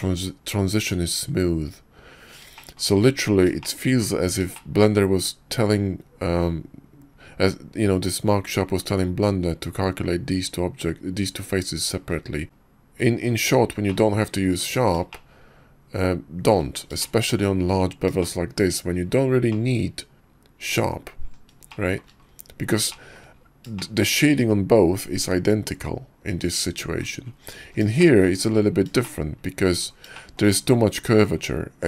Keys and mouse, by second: 2.6 shift+click, 3.6 shift+click, 4.5 shift+click, 13.8-14.6 middle drag, 15.1-16.6 shift+middle drag, 16.8 shift+middle click, 18.2-18.9 shift+middle drag, 19.6-20.8 middle drag, 21.7 shift+middle click, 22.9 shift+middle click, 23.7 shift+middle click, 28.0 shift+middle click, 29.0-29.6 shift+middle drag, 30.2 shift+middle drag.